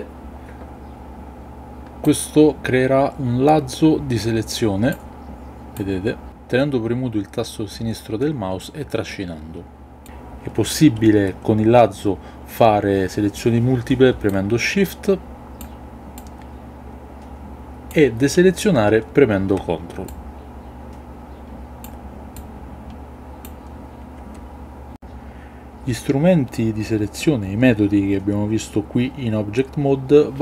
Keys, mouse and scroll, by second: 2.0-5.2 drag, 5.7-8.2 drag, 8.7-10.0 drag, 14.3-15.8 shift+drag, 16.2-18.1 shift+drag, 20.0-21.9 ctrl+drag, 22.3-23.5 ctrl+drag.